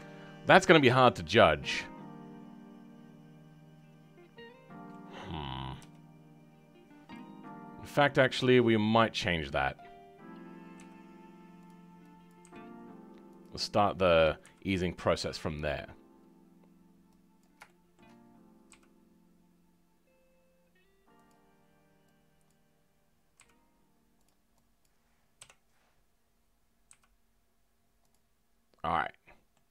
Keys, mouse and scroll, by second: 0.6-4.5 middle drag, 7.6-9.0 scroll up 3, 9.0 Left, 10.7 g, 12.2 Left, 12.4 g, 16.5-17.4 scroll up 3, 17.4 click, 17.6-18.7 shift+middle drag, 18.7 g, 22.4 click, 23.4 g, 24.8 click, 25.8-26.2 scroll down 2, 26.8 g, 28.8-29.7 middle drag.